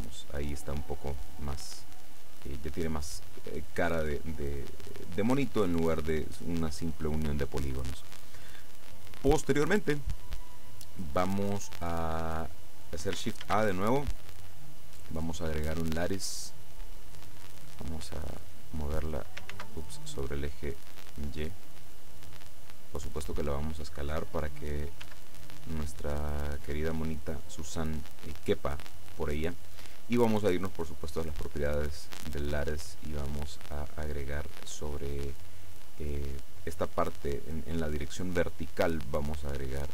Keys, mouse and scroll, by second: 13.5 shift+a, 16.0 click, 17.7-19.4 drag, 19.6 ctrl+z, 20.2-22.2 ctrl+drag, 22.4-24.5 drag, 25.1 s, 26.9 click, 27.6-29.8 drag, 31.2 click, 33.6 click, 39.8 click.